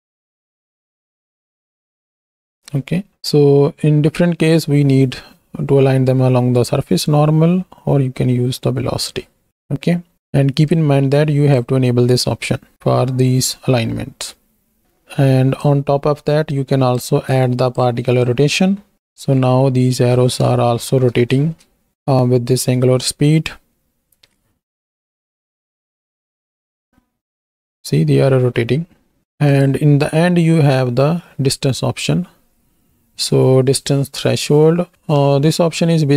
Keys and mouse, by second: 2.4 space, 9.5 middle click, 10.7 click, 15.6-17.1 drag, 17.3 click, 18.2 click, 19.1 shift+click, 20.7 shift+Right, 20.8 shift+Left, 21.4 space, 24.2 space, 24.7 shift+click, 25.4 space, 28.0 space, 29.5 click.